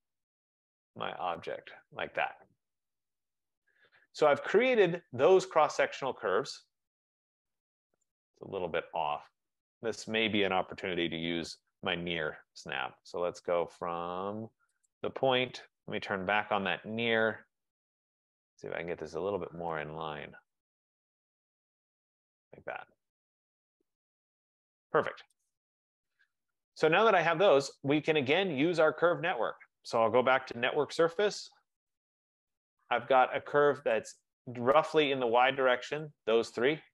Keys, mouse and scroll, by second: 1.6 click, 3.0 middle click, 3.0 middle click, 3.1 middle click, 3.7 click, 4.6 click, 8.1 right click, 9.6 click, 10.7-11.1 typing, 14.9 click, 16.7 click, 18.4 F15, 19.7 middle click, 19.8 middle click, 19.9 middle click, 20.0 middle click, 22.1 click, 23.0 middle click, 23.1 middle click, 25.6 right click, 25.8 Escape, 26.1 Escape, 26.2 Escape, 27.0 middle click, 27.2 middle click, 28.4 right click, 30.7-31.5 typing, 32.8 middle click, 34.0 click, 35.3 shift+click, 36.2 click.